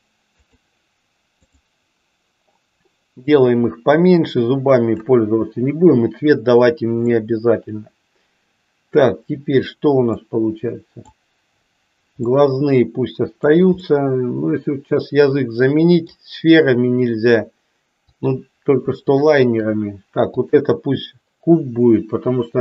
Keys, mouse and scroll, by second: 3.2-4.9 drag, 7.1-9.1 middle drag, 9.1 scroll down 1, 10.2 scroll up 1, 10.3 middle click, 12.3 scroll up 1, 12.6-13.7 middle drag, 14.0-16.2 middle drag, 18.0 click, 19.0 shift+click, 20.2 click.